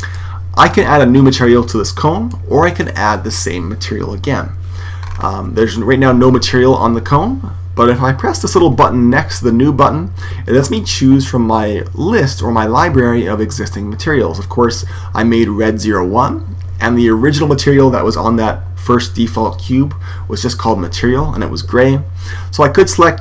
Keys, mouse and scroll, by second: 0.6-3.6 middle drag, 4.9-10.6 middle drag, 10.6 click.